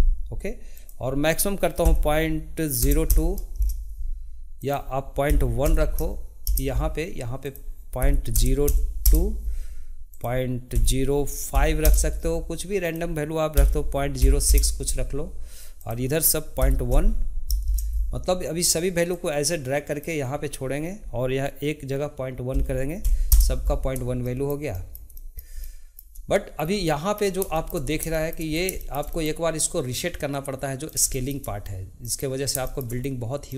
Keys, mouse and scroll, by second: 4.6-18.8 drag, 19.1-22.3 drag, 24.2-26.5 shift+middle drag, 26.5-26.9 scroll down 2, 26.9-27.9 middle drag, 27.9 scroll up 2, 28.1-28.5 shift+middle drag, 28.5 scroll down 1, 28.8-30.4 shift+middle drag, 30.4 click, 31.1-33.5 shift+middle drag.